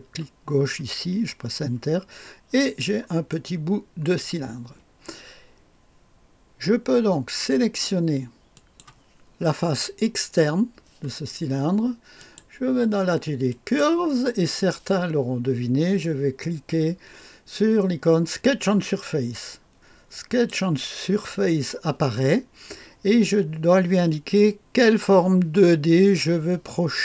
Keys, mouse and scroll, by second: 1.8-2.4 scroll up 1, 2.4-3.2 scroll down 1, 3.2-4.4 drag, 8.5 click, 12.1 click, 13.4 click, 18.4 click, 20.2 click.